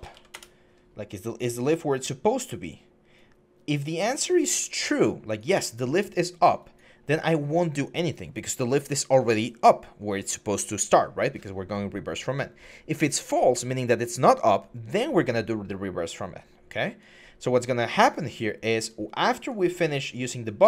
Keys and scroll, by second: 0.1 Return.